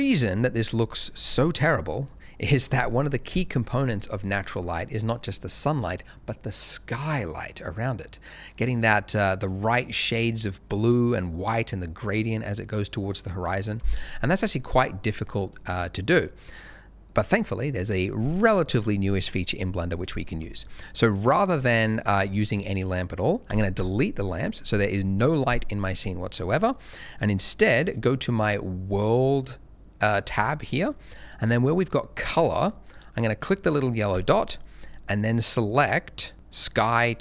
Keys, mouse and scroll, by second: 2.1 middle click, 2.9 scroll down 1, 23.4 x, 23.7 click, 25.8 scroll up 1, 26.6 middle click, 34.1 click.